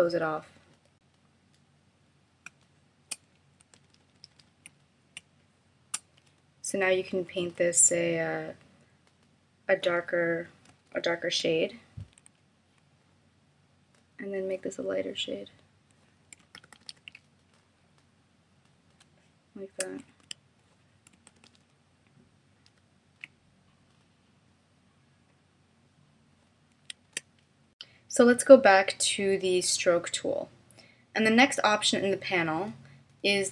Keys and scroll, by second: 2.5 space, 3.8 super+-, 5.2 space, 11.2 alt+k, 16.6 super+=, 19.0 space, 20.2 d, 21.3 super+-, 22.6 super+=, 27.0 shift+m.